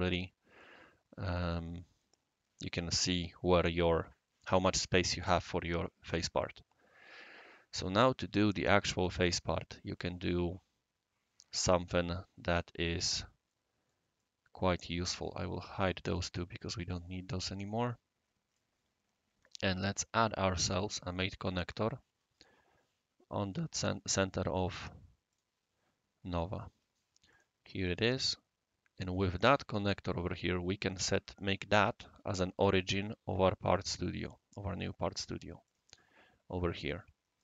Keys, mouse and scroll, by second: 0.0 scroll up 1, 0.1 scroll down 1, 0.6-2.9 right drag, 6.1-6.4 middle drag, 6.8-7.3 scroll up 1, 13.5-13.9 middle drag, 14.2-14.9 right drag, 16.0 click, 16.9 click, 17.7-18.6 right drag, 20.6 click, 23.4 click, 25.3 click, 27.3 click, 33.6 click, 35.6 click.